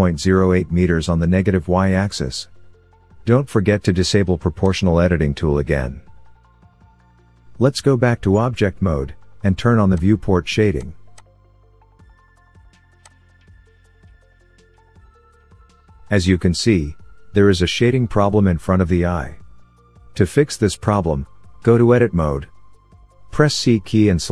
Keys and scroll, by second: 7.1 Tab, 21.7 Tab.